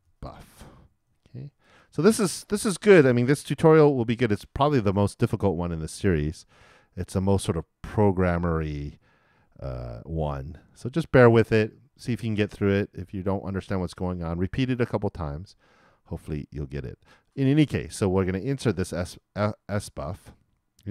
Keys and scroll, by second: 0.4-1.6 typing.